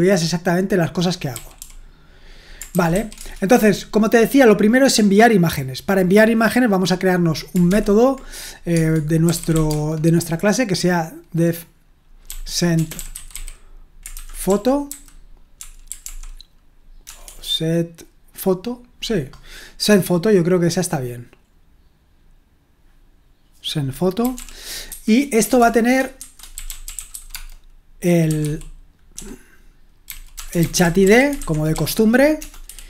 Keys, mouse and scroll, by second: 1.3-3.4 typing, 7.7 0, 8.7 Tab, 9.0-10.0 typing, 12.2-17.2 typing, 24.0-32.8 typing.